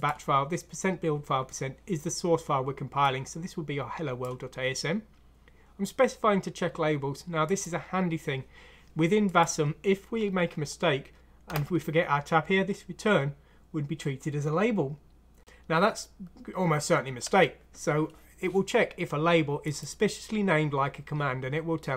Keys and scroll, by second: 11.5 BackSpace, 17.2 Tab.